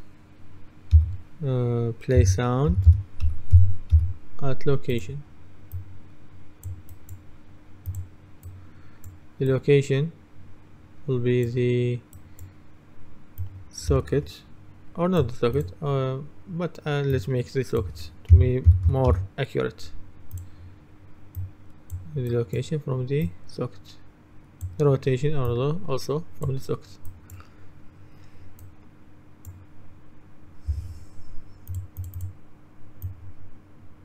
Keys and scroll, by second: 1.0 s, 2.3-4.5 typing, 18.2-19.4 typing.